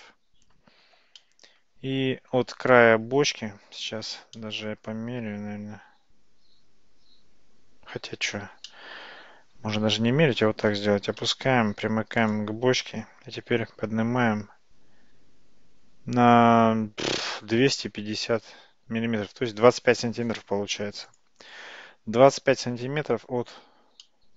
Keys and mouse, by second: 1.3-2.4 middle drag, 4.4-8.3 middle drag, 8.7-10.2 middle drag, 11.1 g, 14.0 g, 24.1-24.3 middle drag.